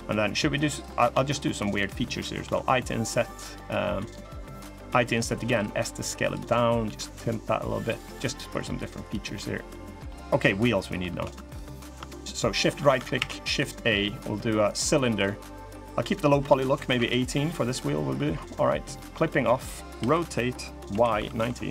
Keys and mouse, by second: 0.5 click, 1.5 shift+click, 2.2 i, 3.4 middle click, 4.6 i, 5.2 s, 6.6 g, 8.1 middle click, 9.1 middle click, 9.8 middle click, 11.0 1, 11.2 click, 12.9 shift+a, 14.8 middle click, 15.9-17.3 drag, 18.6 click, 19.0 middle click, 19.7 r.